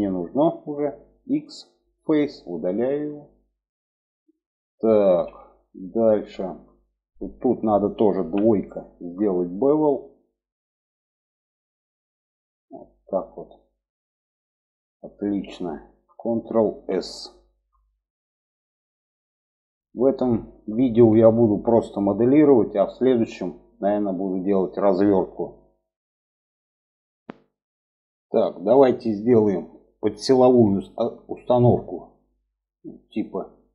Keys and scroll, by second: 1.3 x, 8.2 2, 16.6 ctrl+s.